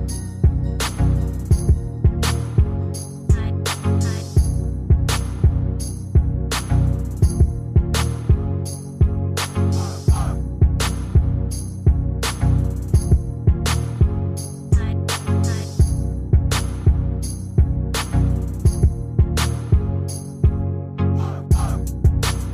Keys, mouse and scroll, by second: 20.8-21.6 ctrl+scroll up 1, 22.1 shift+click.